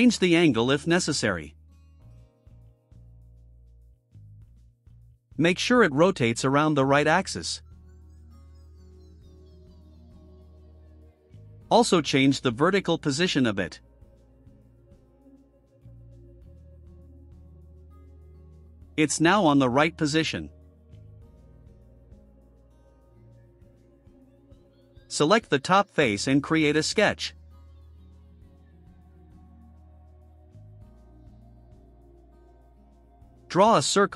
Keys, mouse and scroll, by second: 0.8 click, 2.3 click, 3.1-4.1 typing, 5.1 click, 6.3 click, 7.0 1, 7.6 click, 8.3 0, 10.7 click, 13.6 click, 14.8 click, 15.9 click, 16.5-16.9 right drag, 17.8 click, 18.3 right click, 18.9-19.2 scroll up 1, 19.2 middle click, 21.1 click, 23.7 click, 25.1 right click, 26.2 click, 30.8 click, 32.7-33.2 scroll down 2, 33.4-33.8 scroll up 2.